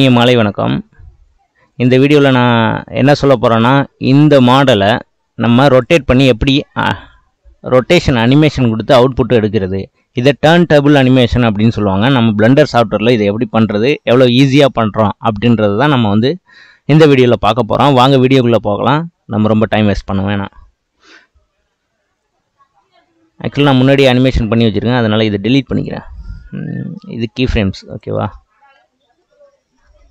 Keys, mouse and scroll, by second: 0.8-1.3 scroll up 1, 1.3-1.6 scroll up 8, 1.6-4.1 middle drag, 4.1 click, 5.7 shift+click, 25.7 click, 27.1 Delete, 29.2-30.1 middle drag.